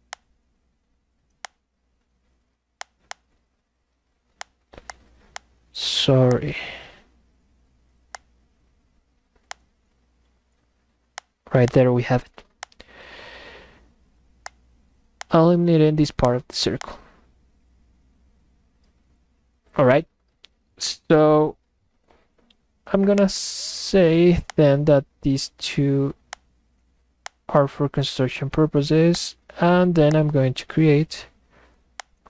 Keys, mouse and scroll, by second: 0.1 click, 1.4 click, 2.8 click, 3.1 click, 4.4 click, 4.8 click, 5.4 click, 6.3 click, 8.2 click, 9.5 click, 11.2 click, 11.6 click, 12.6 click, 14.4 click, 15.2 click, 16.3 click, 16.8 click, 23.2 click, 24.5 ctrl+click, 26.3 click, 27.3 click, 29.1 click, 30.1 click, 32.0 click.